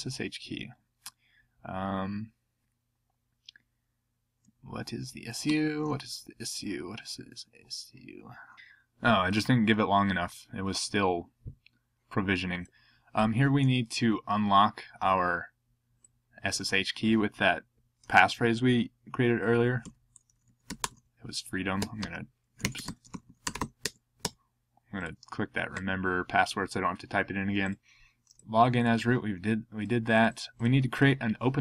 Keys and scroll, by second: 5.5 ctrl+c, 5.8 ctrl+p.